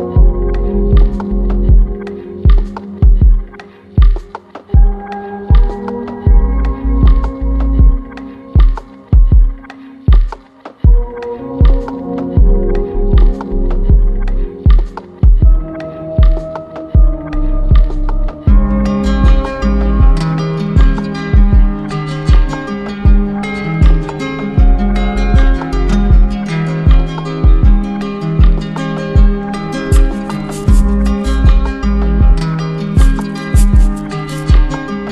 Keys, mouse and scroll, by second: 1.1-2.1 drag, 3.0 click, 4.5 click, 6.2 click, 6.6 shift+click, 7.6 alt+click, 9.1 click, 9.9 click, 11.6 click, 13.0 click, 14.9 alt+click, 15.9 click, 17.1 alt+click, 17.5 alt+click, 22.1 click, 26.1 click, 27.9 click, 28.1 click, 28.4 click, 28.7 click, 29.1 click, 31.7 click.